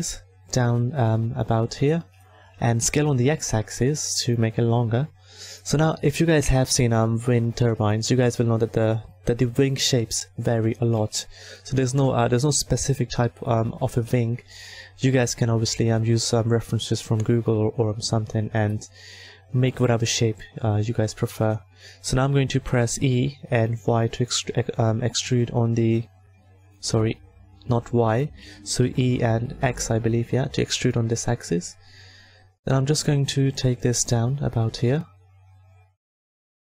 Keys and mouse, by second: 2.8 s, 10.3 click, 10.9 Tab, 14.2 s, 20.8 e, 27.8 ctrl+z, 28.8 e, 31.4 s, 34.7-36.7 drag.